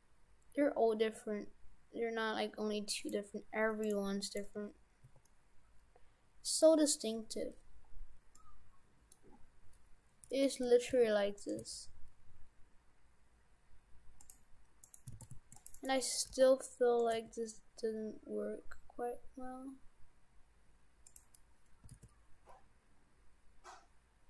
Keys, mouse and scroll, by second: 1.9 g, 3.9 right click, 4.3 right click, 4.6 Tab, 5.1 Tab, 6.6 right click, 7.6-8.4 scroll up 5, 8.4 middle click, 9.4 scroll up 2, 10.9 s, 11.6 s, 14.9 right click, 15.2 shift+f, 15.8 right click, 16.3 g, 17.2 g, 21.8 g.